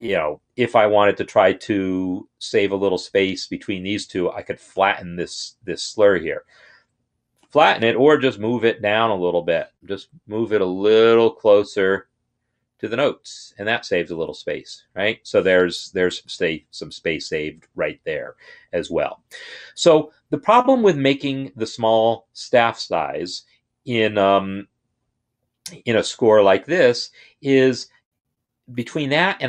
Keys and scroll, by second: 8.2 Down, 8.6 Down, 9.0 Down, 11.5 Up, 13.5 Up.